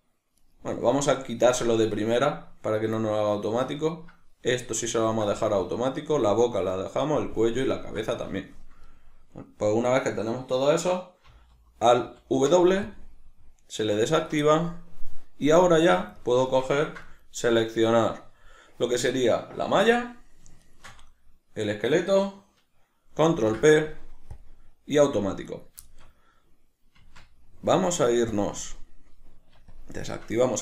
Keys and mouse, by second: 0.4 shift+right click, 1.2 shift+right click, 3.0-17.6 middle drag, 12.0 alt+w, 15.8 Tab, 17.6 right click, 20.6 shift+right click, 23.4 ctrl+p, 25.5 right click, 25.9-29.8 shift+middle drag, 27.0 Tab, 28.4 click, 29.8-30.6 shift+drag.